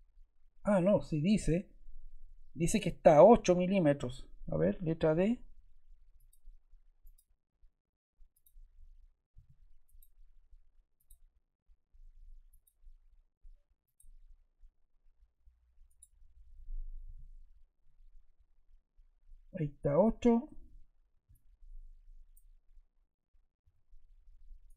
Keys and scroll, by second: 5.1 d, 9.3 d, 17.0 8, 17.7 Return, 19.8 Escape, 23.5 Escape.